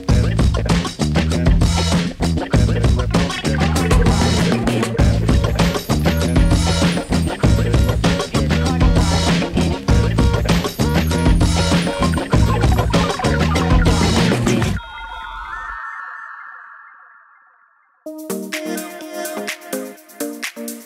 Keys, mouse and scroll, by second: 0.0 =, 0.3 =, 1.4 u, 3.0 shift+Page_Down, 3.9 shift+Page_Up, 5.8-6.4 shift+click, 9.8 Page_Down, 12.2-13.8 drag, 16.2 F9, 16.9-20.0 drag, 19.9 space.